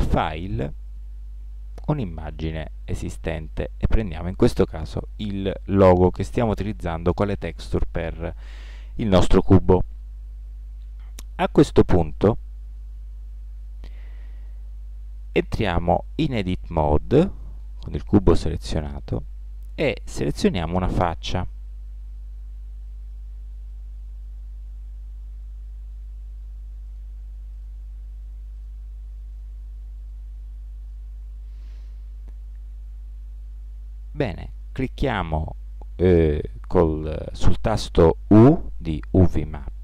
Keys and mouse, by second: 13.0 middle click, 13.2-14.5 middle drag, 17.7 Tab, 21.5-24.7 middle drag, 27.1 right click, 30.2-31.3 middle drag, 38.8 u.